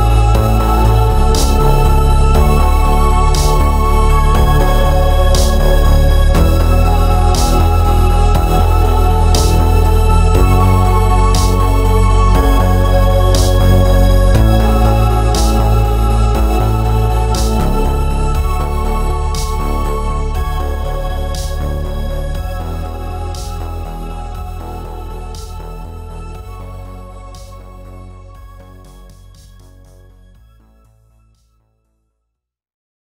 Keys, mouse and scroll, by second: 0.4 click, 1.0 g, 2.5 click, 3.4 ctrl+r, 4.2 click, 4.9 g, 5.7 click, 6.0 ctrl+r, 7.8 Escape, 8.5 ctrl+r, 10.1 click, 10.3-13.0 middle drag, 13.0-14.2 drag, 13.9 Return, 14.2-15.8 middle drag, 15.8-17.7 drag, 16.5 Escape, 18.0 KP_3, 18.5 g, 19.4 Escape, 19.8 click, 20.3 g, 21.8 click, 22.0 scroll down 1, 22.1-24.1 middle drag, 23.5 Tab, 23.9 shift+z, 24.1 click, 24.3-26.1 middle drag, 24.5 scroll down 1, 26.4 KP_3, 26.9 scroll up 1, 27.1 shift+middle click, 27.4 scroll up 1, 27.8 shift+z, 29.0 Tab, 29.5-30.3 scroll down 1, 30.3-30.7 scroll up 1, 30.7 middle click, 31.0 scroll down 1, 31.3-32.3 middle drag, 31.8 Tab, 32.1 z, 32.3 click, 32.5 middle click.